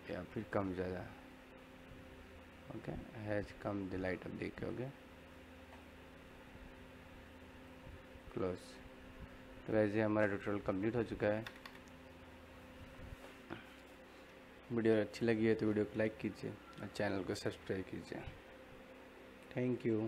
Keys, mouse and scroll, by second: 9.0-16.3 middle drag, 13.5-14.0 typing.